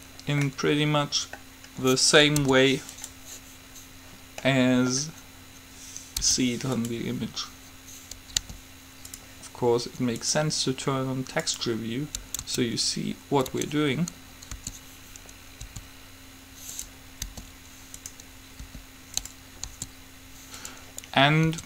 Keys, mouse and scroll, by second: 0.6-2.6 middle drag, 2.6 u, 4.6-6.3 middle drag, 6.3 u, 8.6 g, 10.3-12.1 drag, 12.6 Tab, 13.8 Tab, 14.8 d, 15.8 s, 17.4 g, 18.7 r, 19.8 s.